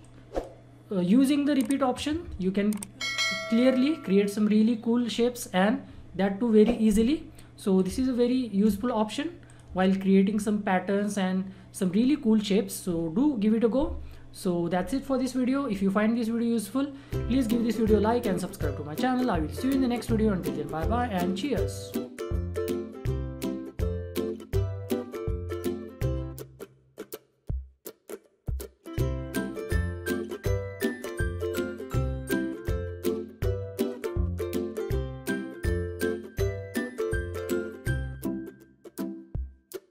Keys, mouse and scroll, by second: 8.6 Delete, 9.4 click, 9.6 Delete.